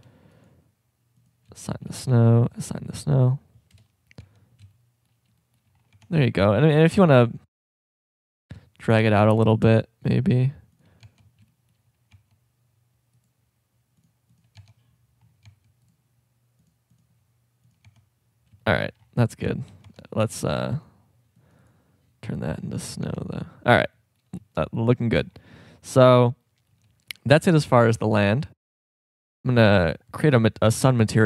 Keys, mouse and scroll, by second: 2.0 a, 2.1 c, 3.7 KP_0, 4.2 Tab, 5.9 Tab, 11.0 Tab, 11.5 shift+scroll up 1, 12.1 Tab, 13.2 right click, 14.6 Tab, 15.5 Tab, 17.9 Tab, 18.6 shift+scroll, 20.3 a, 20.6 c, 23.0 Tab, 26.4-27.3 middle drag, 29.4 click.